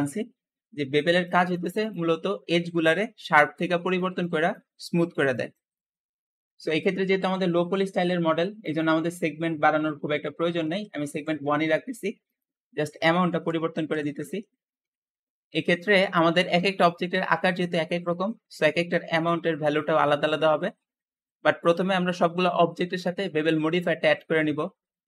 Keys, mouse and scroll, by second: 0.0 Escape, 0.9-6.1 drag, 6.1 Escape, 8.5-11.7 drag, 8.7 Escape, 10.5 KP_1, 11.0 Return, 11.7 Return, 11.7 1, 12.2 click, 13.2-14.8 typing, 13.8 click, 14.5 Return, 14.6 Return, 15.8-16.4 scroll down 4, 16.4-19.4 middle drag, 20.9-22.3 middle drag.